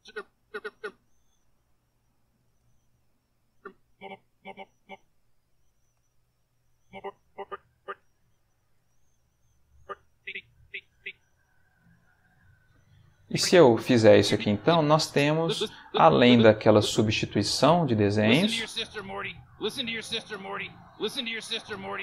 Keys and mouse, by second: 1.2 g, 2.5 space, 3.4-4.7 drag, 5.1 g, 6.0 space, 6.7 click, 8.0 g, 8.7 space, 9.7 click, 11.7 alt+g, 13.2-16.9 drag, 17.4 click, 18.3 space.